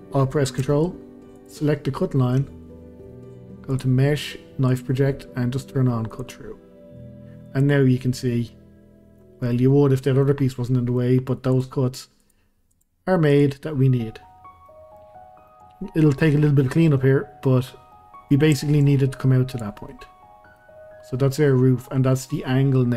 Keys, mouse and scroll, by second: 1.4 ctrl+click, 3.7-6.2 drag, 7.6 click, 8.5 middle click, 9.4-9.7 scroll down 1, 9.7-11.5 middle drag, 11.5 click, 12.2 click, 12.7 click, 13.3 click, 13.9 scroll up 1, 14.4 scroll down 1, 14.7 middle click, 15.1-15.4 scroll up 1, 15.4-19.5 middle drag, 19.5 click, 19.9-22.9 middle drag.